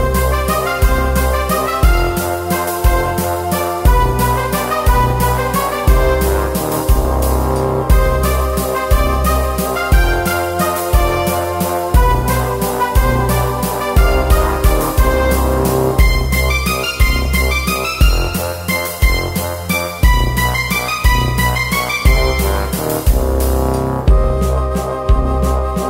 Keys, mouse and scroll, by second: 0.1 KP_7, 0.5 s, 1.0 z, 1.1 Tab, 1.4-2.7 drag, 1.7 Tab, 2.5 ctrl+r, 2.8 s, 3.5 ctrl+r, 3.6-5.0 drag, 3.7 s, 3.9 Tab, 5.0 alt+F3, 6.0 middle click, 6.2 Tab, 6.7 v, 7.1 l, 7.2 x, 8.0 ctrl+e, 8.4 ctrl+f, 8.9 KP_7, 9.0 Tab, 9.3 middle click, 9.5 click, 9.9 Tab, 9.9 middle click, 10.0 click, 10.0 right click, 10.2 middle click, 10.5 click, 10.7 e, 11.0 click, 11.1 e, 11.9 KP_Divide, 12.1 ctrl+f, 12.5 Tab, 12.6 KP_Divide, 13.3 shift+space, 13.9 shift+space, 14.3 KP_7, 15.1 Tab, 15.2 middle click, 15.3-16.9 typing, 15.5 click, 16.3 click, 17.2 middle click, 18.0 ctrl+f, 18.4 Tab, 18.8-22.3 typing, 20.6 click, 21.0 middle click, 21.7 click, 22.1 Tab, 23.2 Tab, 23.3 Tab, 23.5 Tab, 24.1 shift+d, 24.5 click, 24.7 middle click, 25.1 shift+d, 25.5 click, 25.8 middle click.